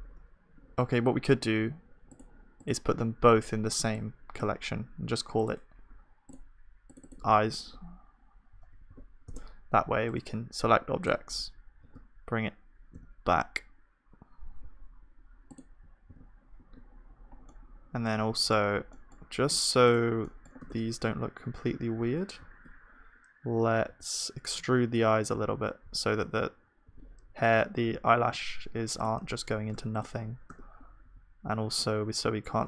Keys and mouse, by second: 3.4-9.3 drag, 4.7-9.3 right drag, 11.9 right click, 11.9 g, 19.9 KP_1, 20.7 Tab, 20.7-23.9 drag, 23.9 e, 29.7 Tab, 31.0-32.6 drag, 31.0 e.